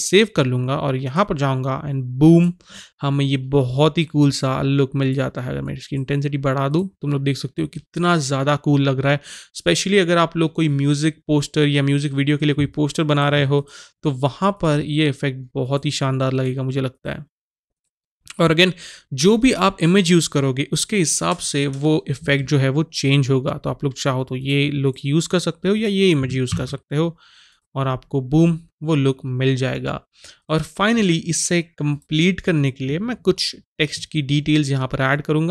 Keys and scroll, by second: 26.6 ctrl+s.